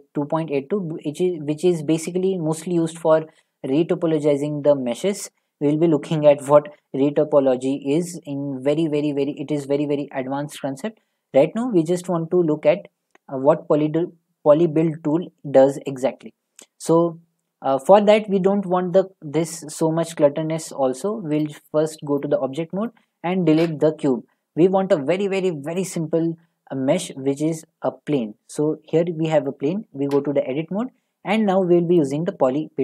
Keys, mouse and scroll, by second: 1.2-4.3 middle drag, 16.0-19.0 middle drag, 20.5 middle click, 21.4 click, 22.2 click, 22.9 click, 23.6 Delete, 25.8 click, 27.6 click, 29.5 middle click, 30.1 Tab, 32.0 click.